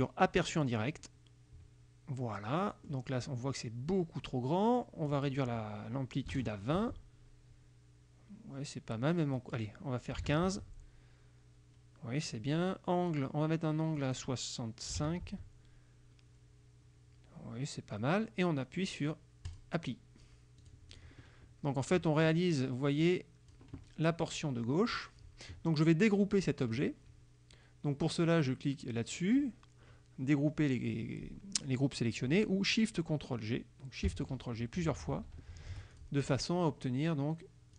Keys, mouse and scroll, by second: 0.6 click, 2.4 click, 5.1 click, 6.3 KP_2, 6.4 KP_0, 6.8 Tab, 9.4 click, 10.2 KP_1, 10.3 KP_5, 10.5 Tab, 14.1 click, 15.0 KP_6, 15.1 KP_5, 15.3 Tab, 19.5 click, 20.7 click, 21.9 click, 23.1 click, 34.9 ctrl+shift+g, 36.0 ctrl+shift+click.